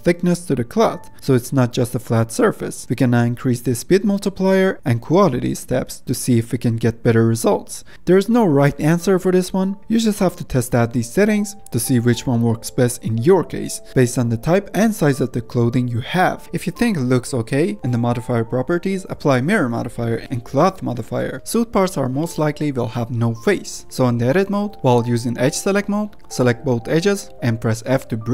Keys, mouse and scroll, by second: 2.5-4.4 middle drag, 4.4-7.5 drag, 7.5 space, 16.4 middle click, 16.5 click, 16.8-18.0 scroll down 2, 18.0-18.7 scroll up 1, 18.7-20.0 scroll up 5, 20.0 ctrl+a, 21.8 ctrl+a, 22.4-22.8 middle drag, 22.8 scroll up 1, 22.9 Tab, 23.1 middle click, 23.4-24.2 scroll up 4, 24.2-25.4 middle drag, 25.4 2, 26.3 click, 26.8 shift+click, 27.6 f.